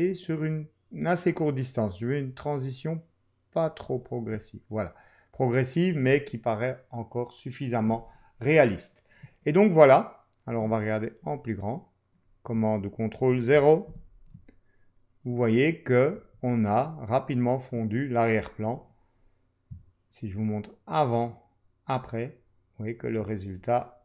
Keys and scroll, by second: 13.9 super+0.